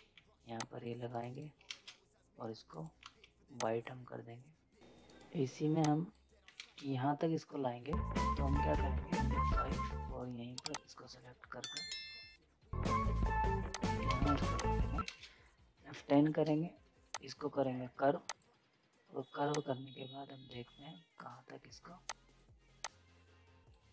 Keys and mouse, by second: 0.5 click, 1.1 right click, 1.7 ctrl+space, 2.7 right click, 3.0 z, 3.6 click, 4.8 right click, 5.8 click, 6.6 ctrl+space, 9.4 F5, 10.7 click, 13.7 click, 14.1 ctrl+space, 14.3 z, 14.6 click, 15.0 ctrl+space, 15.9 F10, 17.1-23.9 drag.